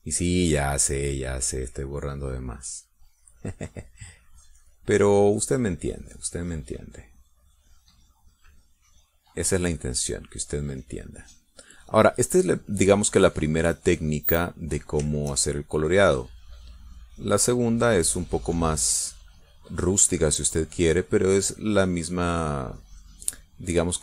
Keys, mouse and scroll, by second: 8.3-15.6 drag, 15.7-18.9 shift+drag, 19.0 middle click, 19.9-24.0 drag.